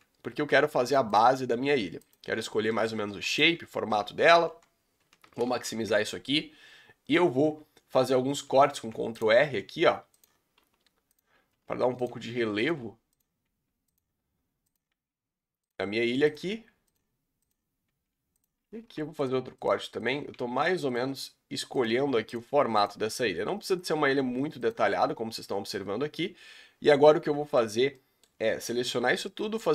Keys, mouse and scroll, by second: 0.5 s, 1.5 s, 2.3-2.6 scroll down 3, 2.6 middle click, 2.9 s, 3.9 KP_Decimal, 4.4 KP_7, 5.5 ctrl+space, 6.1 scroll down 4, 8.7 ctrl+r, 10.6 s, 11.6 1, 12.1 click, 12.5 g, 13.2 click, 13.5 g, 14.7 click, 14.9 g, 16.3 click, 16.5 g, 17.5 click, 18.0 g, 18.8 ctrl+r, 20.1 click, 20.3 g, 21.8 click, 22.0 g, 22.8 click, 23.0 g, 24.7 click, 25.3 scroll down 4, 25.9-26.9 scroll up 3, 26.0-28.7 middle drag, 27.7 scroll down 2, 28.3-28.7 scroll up 2, 28.7 a, 29.0 scroll up 2, 29.3 middle click.